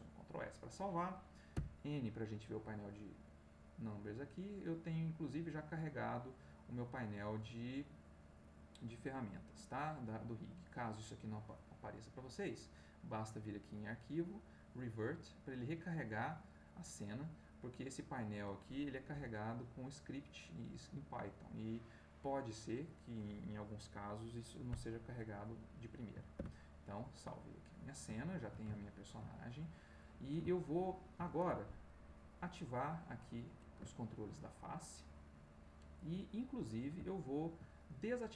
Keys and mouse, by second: 1.5 n, 3.3 click, 4.3-6.0 middle drag, 6.2-7.2 middle drag, 7.4 middle click, 8.1 middle click, 9.2-10.2 drag, 13.3 click, 15.1 click, 15.8 click, 19.1 n, 20.0 click, 21.6 click, 24.8 middle click, 26.3 ctrl+s, 27.1-28.1 middle drag, 28.2 shift+middle click, 28.7 ctrl+shift+middle click, 29.7 ctrl+middle click, 30.9 ctrl+middle click, 32.7 click, 33.9 ctrl+middle click, 35.7-36.9 middle drag, 37.0 ctrl+middle click, 38.2-38.3 middle drag.